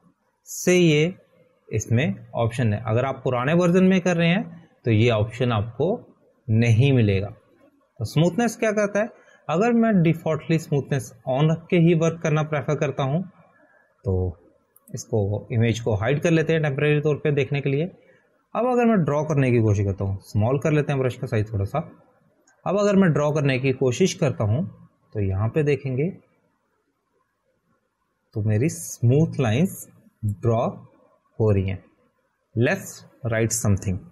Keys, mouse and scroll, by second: 17.3 click, 22.1 [, 22.3 [, 22.4-23.0 [, 23.4 [, 25.8 click, 26.5 click.